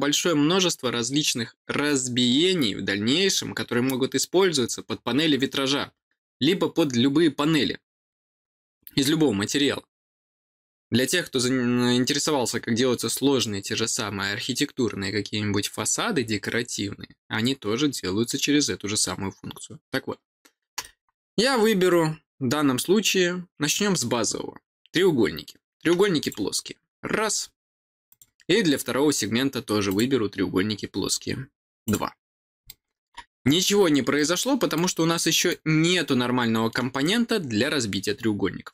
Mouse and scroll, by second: 21.3 middle click, 21.6 middle click, 26.1 click, 28.0 click, 29.8 click, 30.7-31.1 scroll down 4, 31.8 click, 32.6 middle click, 33.6 scroll up 2, 34.1 middle click, 35.1 middle click, 35.9 middle click.